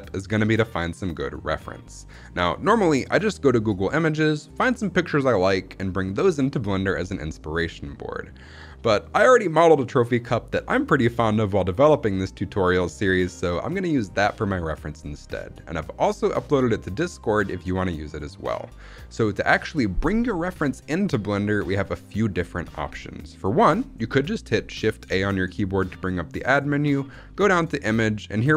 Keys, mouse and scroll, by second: 25.0 shift+a.